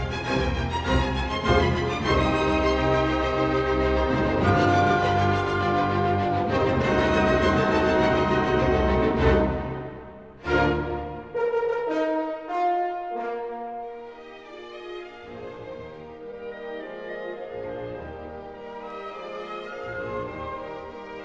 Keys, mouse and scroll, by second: 0.9 click, 1.1 Escape, 2.1-3.0 ctrl+scroll, 5.0 s, 8.1 click, 9.0 click, 9.5 click, 10.7 typing, 11.1 Return, 12.0 Escape, 14.1 click, 14.4 q, 15.7 click, 18.0 middle click, 18.9 ctrl+middle click, 19.7 s, 21.0 click.